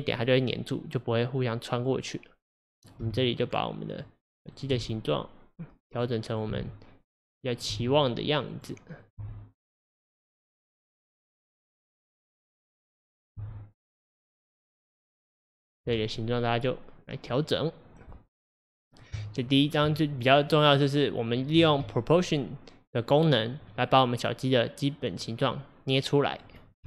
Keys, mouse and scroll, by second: 2.8 click, 3.1 g, 4.6 click, 4.8 g, 6.3 click, 6.6 g, 7.6 click, 7.8 g, 9.0 click, 9.2 g, 11.7 click, 12.6-13.1 scroll up 1, 13.1-13.4 scroll down 2, 13.4 g, 16.2-18.0 middle drag, 18.0 click, 19.2 Tab, 20.7-21.7 middle drag, 21.7 alt+z, 23.7-26.8 middle drag.